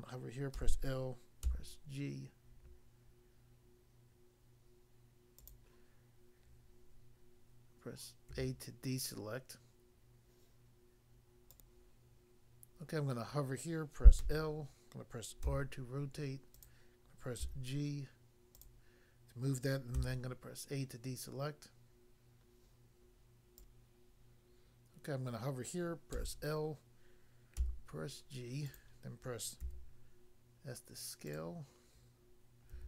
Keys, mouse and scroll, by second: 0.5 l, 1.5 g, 5.4 click, 5.5 click, 8.3 a, 11.5 click, 11.7 click, 14.1 l, 15.4 i, 15.5 r, 16.5 click, 17.4 g, 18.6 click, 19.9 a, 23.6 click, 26.1 l, 27.7 g, 28.7 click, 29.6 s, 31.3 click, 31.3 click, 32.7 g.